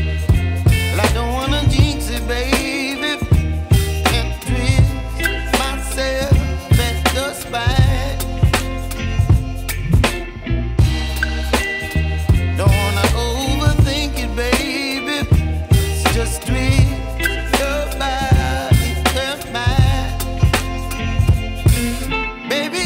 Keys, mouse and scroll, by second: 0.3 click, 3.0 alt+g, 4.2 r, 8.7 ctrl+z, 11.1 ctrl+z, 12.4-15.5 middle drag, 15.5 alt+g, 18.6-21.6 middle drag.